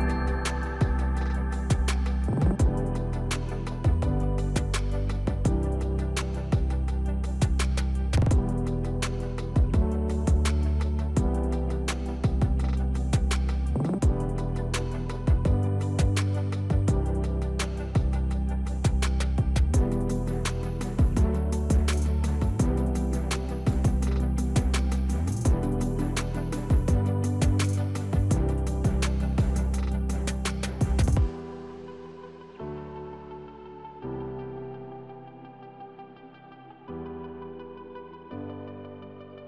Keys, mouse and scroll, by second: 2.5 click, 2.5 click, 3.5 click, 5.9 right click, 7.7 click, 10.1 click, 15.8 click, 16.2 click, 16.6 click, 17.0-17.4 scroll down 1, 18.5 click, 18.8 click, 19.3 click, 19.7-20.2 scroll up 1, 20.5-21.1 scroll down 1, 22.6 click.